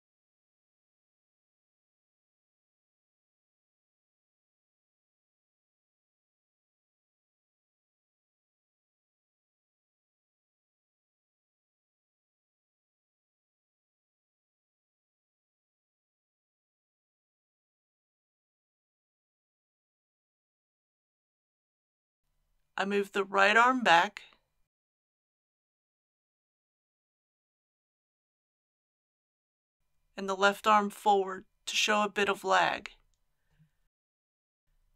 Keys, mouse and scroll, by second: 2.7 click, 5.4 g, 9.0 click, 9.6 r, 12.0-13.0 drag, 21.6-23.0 middle drag, 23.4 click, 24.0 r, 24.3 x, 27.7 click, 28.2 middle click, 30.0 click, 30.5 r, 30.8 x, 32.7 click, 34.7 a.